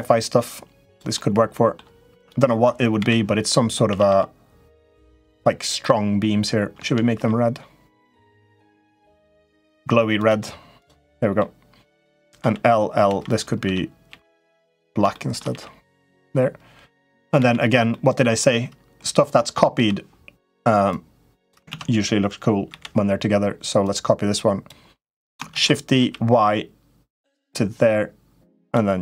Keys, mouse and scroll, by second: 0.9 middle click, 1.9 click, 2.8 l, 3.6 a, 3.8 g, 10.5 click, 10.8 middle click, 11.6 click, 12.2 l, 12.8 l, 13.4 a, 13.8 g, 14.9 shift+middle click, 15.2 g, 17.1 l, 17.7 middle click, 19.5 l, 20.7 click, 21.5 ctrl+z, 22.5 l, 23.7 click, 25.3 shift+d.